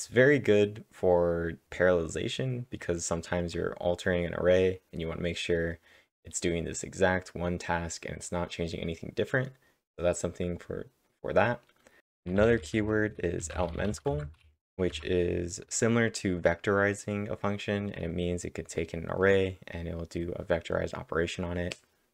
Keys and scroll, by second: 12.0 alt+Tab, 12.0-14.3 typing, 16.6-17.4 typing.